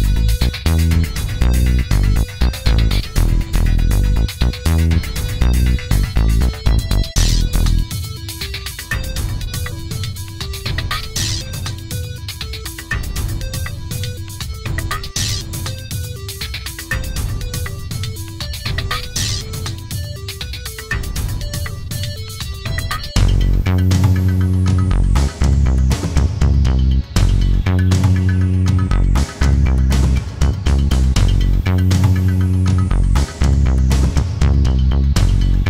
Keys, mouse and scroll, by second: 0.8 ctrl+d, 1.5-3.2 ctrl+drag, 4.3 ctrl+d, 5.0-6.4 drag, 7.5 ctrl+d, 8.3-10.0 drag, 11.0 click, 12.7 click, 13.7 click, 19.4 click, 22.8 click, 25.2 click, 26.1 click, 27.1 F1, 27.7 click, 29.5 click, 30.3 click, 31.4 F1, 31.9 click, 34.3 click, 35.2 click.